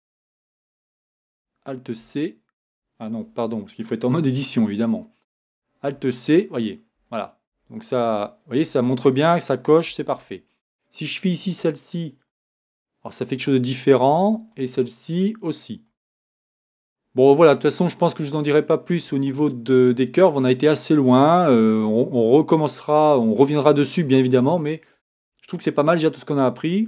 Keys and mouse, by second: 0.6 z, 2.0 alt+c, 4.2 Tab, 5.9 alt+c, 6.9 alt+c, 7.5 alt+c, 8.1 alt+c, 8.5 alt+c, 9.9 alt+c.